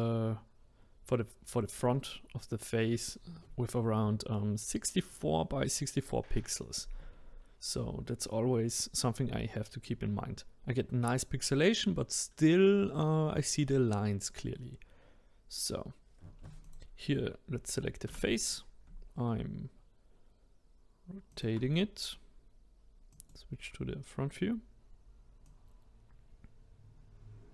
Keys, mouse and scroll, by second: 15.3-15.8 scroll up 1, 15.8-16.6 scroll down 1, 16.6 click, 18.0 r, 23.1 click, 23.8-24.8 scroll up 2, 25.4 click.